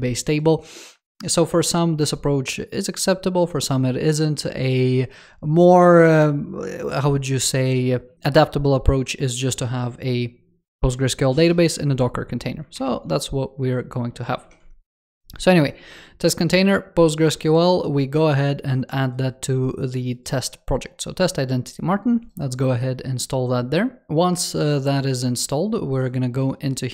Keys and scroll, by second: 12.6 super+2, 14.3 super+3.